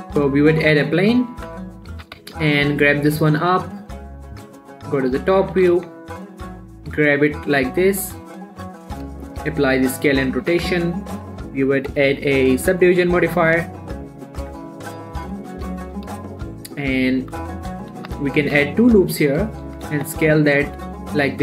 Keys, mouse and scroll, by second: 0.1 shift+a, 0.6 click, 1.1-1.7 scroll down 1, 1.7 1, 2.0 scroll up 1, 2.3 g, 2.6 z, 4.2 click, 5.0 7, 5.4-5.9 scroll up 1, 5.9 s, 6.1 x, 8.9 click, 9.3 ctrl+a, 9.7 click, 10.0 middle click, 10.6 Tab, 11.6 click, 13.6 middle click, 14.8 Tab, 16.0 7, 16.7 ctrl+r, 17.0 click, 17.2 right click, 18.4 ctrl+z, 18.8 ctrl+r, 19.3-19.6 scroll up 1, 19.6 click, 19.7 right click, 20.0 s, 20.3 x.